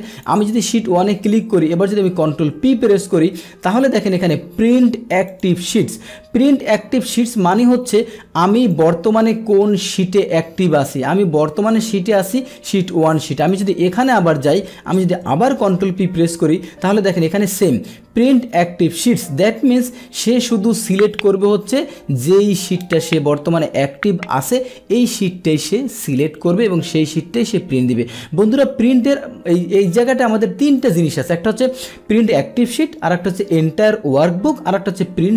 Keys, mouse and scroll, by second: 0.1 click, 2.3 ctrl+p, 5.3 click, 7.2 Escape, 8.1 Escape, 8.7 click, 8.8 Escape, 13.4 click, 15.1 ctrl+p, 17.1 click, 20.4 Escape, 28.9 ctrl+p, 30.8 click.